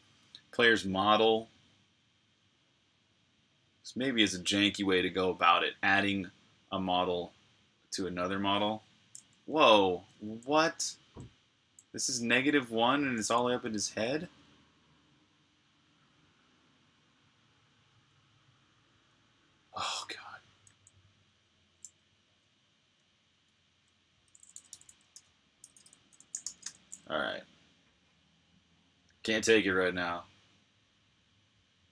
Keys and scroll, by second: 10.1-12.1 typing, 13.7 super+q, 20.5-24.3 typing, 25.6-26.5 typing.